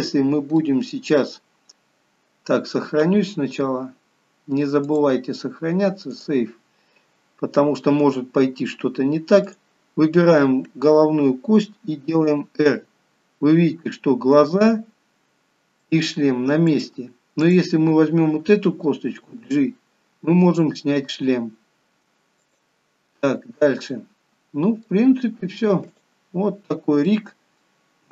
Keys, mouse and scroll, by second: 0.1 click, 0.8 middle click, 5.0 click, 9.6 click, 12.1 r, 17.7 click, 19.3 g, 23.4 middle click, 25.3 g, 26.5 scroll down 3, 27.2-27.8 scroll up 2, 27.3 middle click, 27.8 middle click.